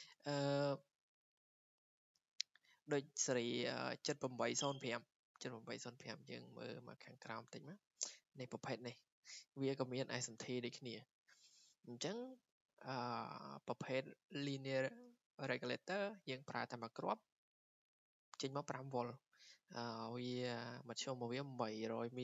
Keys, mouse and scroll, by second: 5.3-6.1 scroll down 15, 6.8 scroll, 9.1 click, 12.0 click.